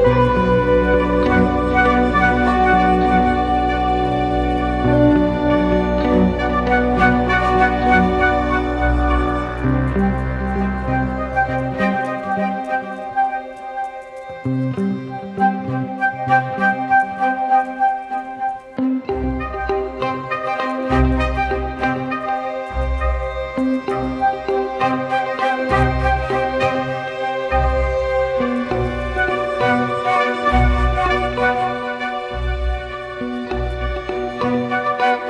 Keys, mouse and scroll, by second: 0.3 Return, 1.4 Down, 3.0 Left, 3.9 Right, 4.6 Down, 4.8 Down, 4.9 Down, 6.8 Down, 7.5 Return, 11.0 ctrl+click, 22.0 double click, 23.5-25.1 typing, 25.0 double click, 31.9-33.1 typing, 32.9 double click.